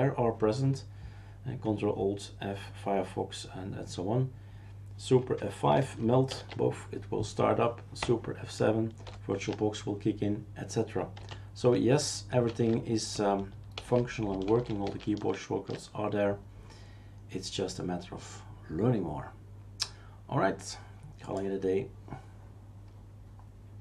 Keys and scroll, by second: 6.3 super+F5, 9.0 super+F7, 12.5 shift+super+q, 13.7 shift+super+q, 14.5 shift+super+q, 14.8 shift+super+q.